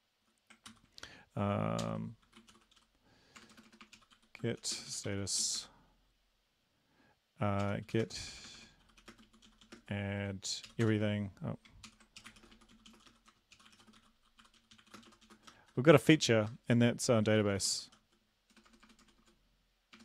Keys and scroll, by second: 0.7 ctrl+c, 1.8 ctrl+l, 2.3-5.4 typing, 5.6 Return, 7.6-10.8 typing, 10.8 Return, 11.9 ctrl+l, 12.2-20.0 typing.